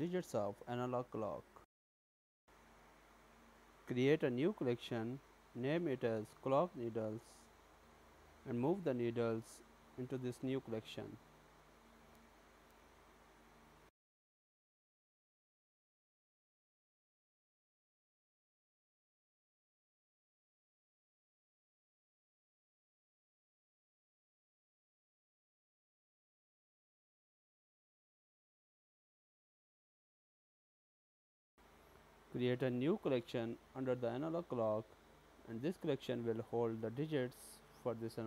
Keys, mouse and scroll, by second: 3.4 e, 10.8 click, 11.4 click, 12.0 shift+click, 12.5 shift+click, 13.0 click, 15.0 click, 15.7 click, 18.2 click, 19.0 click, 19.3 click, 23.1 click, 25.1 click, 25.7 click, 27.0-27.6 scroll down 2, 27.6-28.7 scroll up 1, 28.8 click, 31.8 click, 32.3 right click, 34.0 click, 34.1 click.